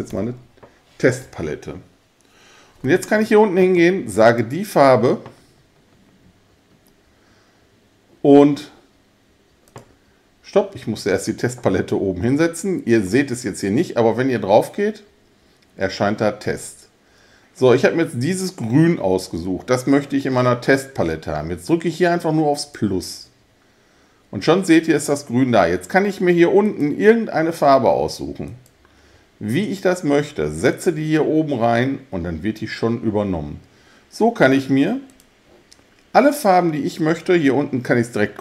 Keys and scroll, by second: 0.0-0.6 typing.